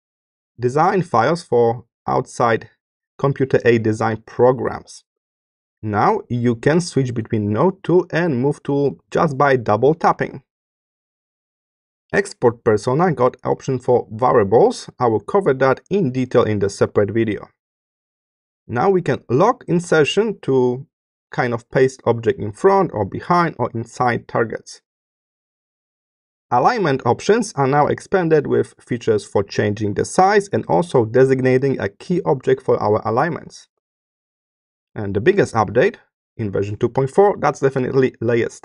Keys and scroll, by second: 5.0 space, 10.5 space, 24.9 space, 33.6 space.